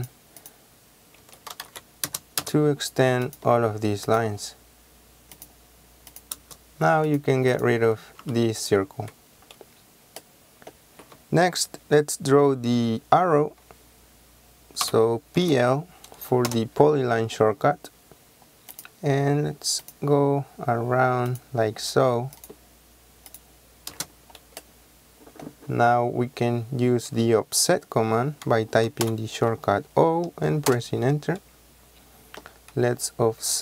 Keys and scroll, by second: 1.3 Escape, 1.6-2.5 typing, 8.3 Delete, 14.9-15.5 typing, 16.5 Return, 24.0 space, 29.1 o, 30.8 Return.